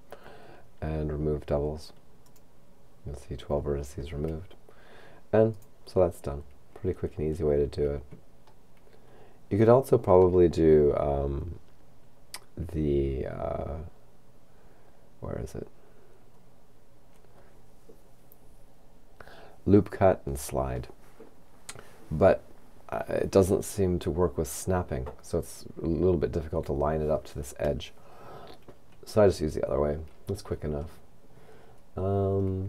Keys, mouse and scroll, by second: 2.3 click, 5.5 right click, 6.6-8.1 scroll down 1, 9.1-11.1 shift+middle drag, 16.4-17.4 scroll up 2, 31.7-32.6 scroll down 4.